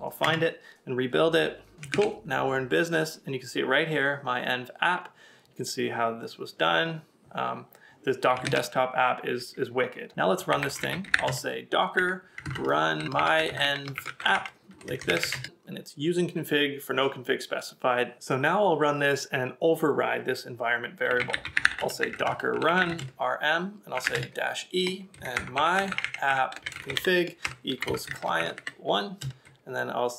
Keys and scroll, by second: 0.2 Return, 1.9 super+Tab, 8.4 super+Tab, 10.5 typing, 11.7-12.4 typing, 22.0-26.4 typing, 28.2-29.2 typing.